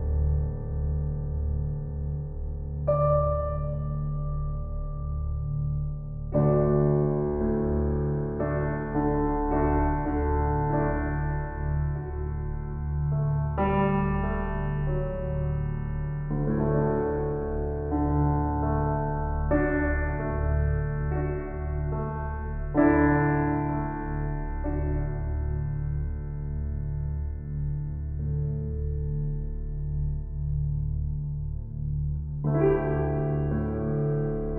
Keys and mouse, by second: 1.6 ctrl+s, 3.2-6.9 ctrl+alt+drag, 9.7 shift+s, 10.5 click, 13.4 click, 14.8 click, 15.7-17.9 drag, 18.6 click, 20.1-21.2 typing, 23.0 Left, 23.1 Left, 23.3-28.3 typing, 28.7 Return, 32.7 click.